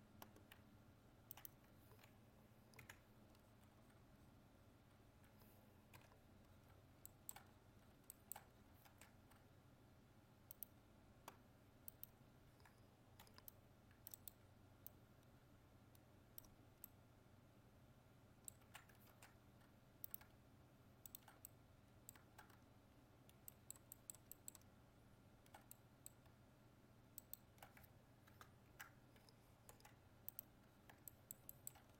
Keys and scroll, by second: 8.9 ctrl+Tab, 19.1 ctrl+Tab, 28.3 ctrl++.